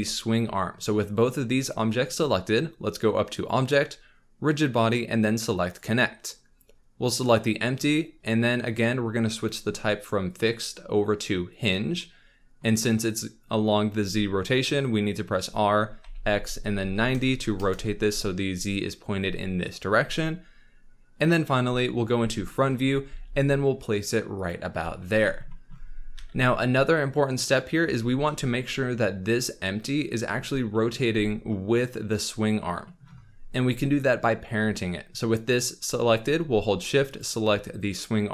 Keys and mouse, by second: 3.3-5.7 drag, 10.2-11.6 drag, 15.1 r, 16.0 x, 16.8 KP_9, 17.1 KP_0, 17.6 Return, 21.4 KP_1, 23.0 g, 24.8 z, 26.1 g, 30.1 z, 31.1 z.